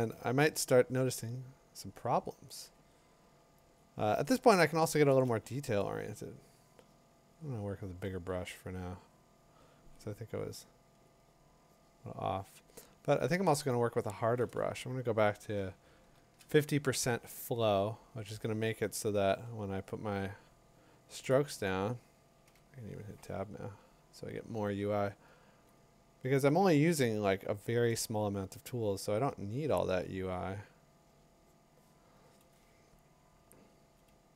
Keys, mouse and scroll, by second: 3.8 click, 4.6 click, 4.9 click, 5.1 click, 11.1 click, 14.1 click, 15.4-21.3 drag, 22.5 Tab, 27.2-29.3 ctrl+click, 29.1 ctrl+click.